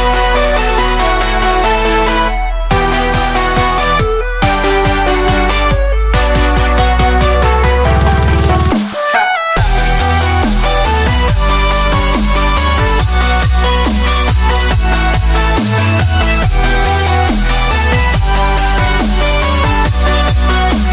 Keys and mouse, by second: 2.5-9.6 middle drag, 11.8 click, 12.9 click, 14.5 click, 16.0 KP_0, 16.2 click, 17.8-20.9 drag.